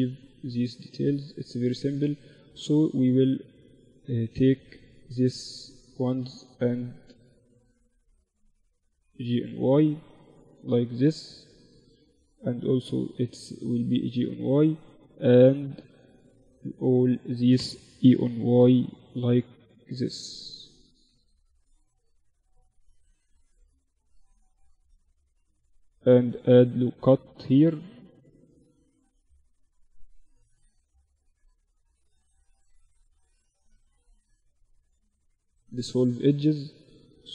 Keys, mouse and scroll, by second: 0.6 Tab, 2.3-5.7 drag, 3.7-5.7 middle drag, 3.7-6.3 right drag, 6.1 click, 6.3 middle click, 7.3-9.5 drag, 11.1-12.9 right drag, 11.7-13.5 drag, 13.8-17.3 right drag, 16.9 e, 22.1 Tab, 23.1 Tab, 24.6 ctrl+r, 28.5 ctrl+r, 32.9 x, 34.8 Tab, 35.3 middle click, 36.3 Tab.